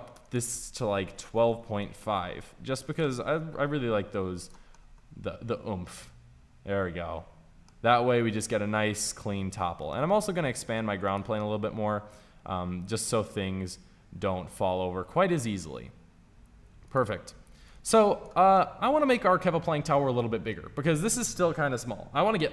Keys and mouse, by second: 0.1-6.7 drag, 10.8 s, 11.3-14.0 drag, 17.6 click, 18.5-19.6 middle drag.